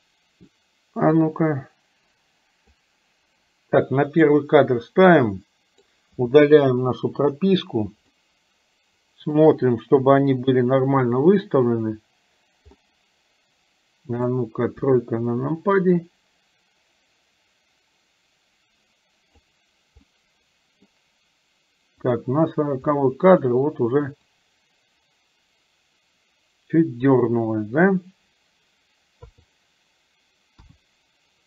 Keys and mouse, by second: 1.3-2.8 drag, 4.2 click, 5.2 click, 6.9 Delete, 8.2-9.4 middle drag, 10.1 KP_7, 12.9-14.3 middle drag, 14.8 KP_3, 16.1-19.6 drag, 20.2 middle click, 22.1 click, 22.9 middle click, 24.3-27.4 drag, 29.2 KP_3, 30.7 KP_1.